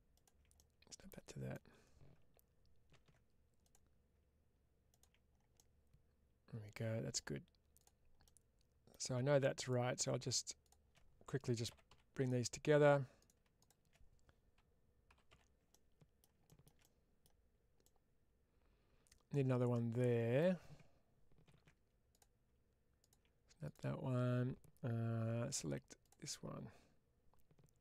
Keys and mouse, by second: 0.0 ctrl+click, 0.4-2.0 middle drag, 5.4-7.0 middle drag, 8.1 middle click, 9.5 click, 13.0 click, 15.6 middle click, 17.7-20.2 middle drag, 23.5 click, 25.9 click, 27.7-27.8 middle drag.